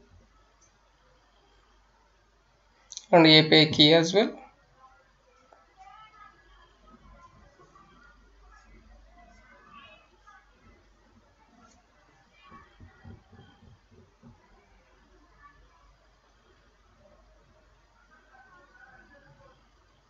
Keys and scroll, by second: 0.0-4.2 typing, 5.3-12.1 typing, 13.6 BackSpace, 14.8-20.0 typing.